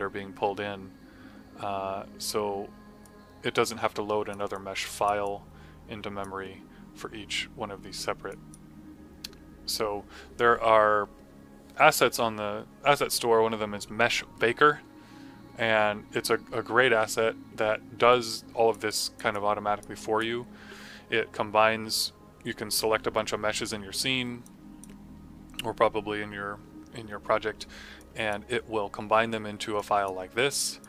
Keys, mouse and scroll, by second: 3.0 click, 19.4 click, 24.3 click, 27.9 click.